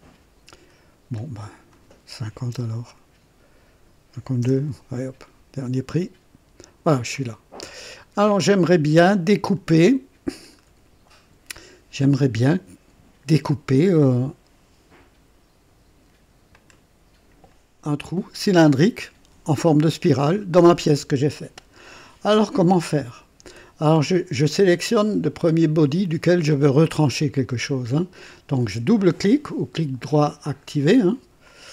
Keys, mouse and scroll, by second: 1.1 click, 2.3 KP_5, 2.7 KP_2, 4.3 Return, 7.1-10.7 drag, 7.6 typing, 11.5-12.4 drag, 16.5-17.5 drag, 25.2 click, 30.4 right click, 31.4 click.